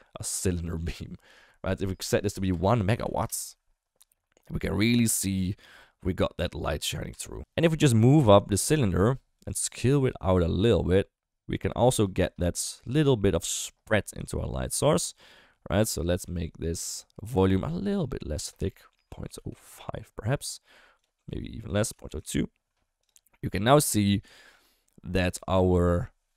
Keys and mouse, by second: 2.1-3.2 drag, 7.1 Tab, 7.4 alt+z, 8.1 click, 8.6 g, 9.8 s, 12.2 Tab, 12.9 click, 14.3 shift+middle drag, 15.1 click, 17.4 click, 18.4-19.7 drag, 21.0-22.2 drag, 23.0 click, 24.4 shift+middle drag.